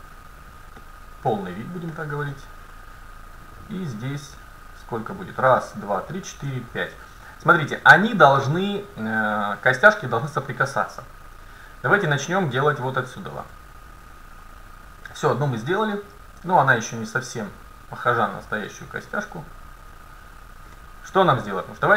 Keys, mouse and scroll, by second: 3.8-5.4 drag, 6.7-8.7 middle drag, 12.1-14.1 drag, 13.9-17.5 middle drag, 16.6-18.4 drag, 20.7-21.9 middle drag.